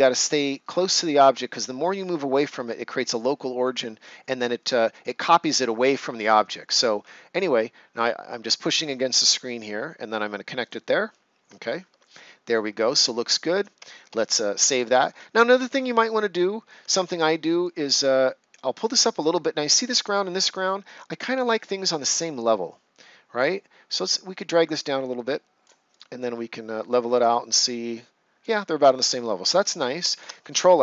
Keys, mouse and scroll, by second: 10.6 click, 11.6 ctrl+scroll down 1, 12.0 right click, 12.7 ctrl+scroll down 1, 14.1 ctrl+s, 14.7 ctrl+scroll up 1, 16.9 ctrl+scroll up 1, 17.6-18.9 drag, 20.9 right click, 21.8 click, 28.9 ctrl+scroll down 1, 29.5 right click, 30.1 ctrl+s.